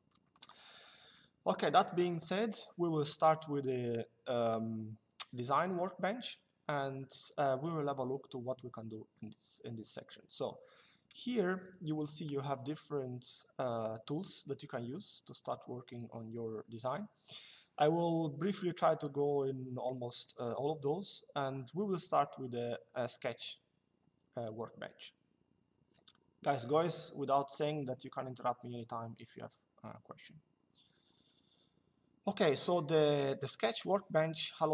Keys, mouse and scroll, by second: 0.0 click.